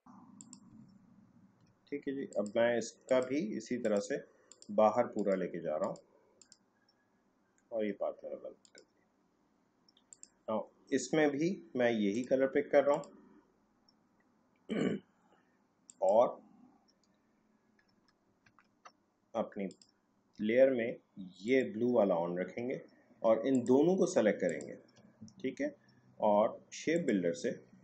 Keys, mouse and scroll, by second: 1.0 alt+scroll down 1, 2.3 click, 15.9 click, 17.9 Tab, 19.7 click, 23.5 click, 24.5 shift+click.